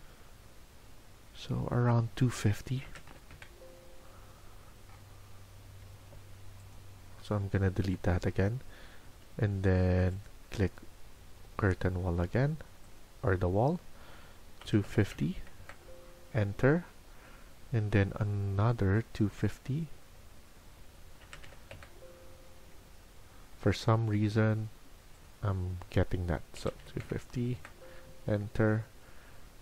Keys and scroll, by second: 6.3 Escape, 6.3 typing, 7.7 Delete, 14.3-15.5 typing, 17.1-17.9 typing, 19.1-20.5 typing.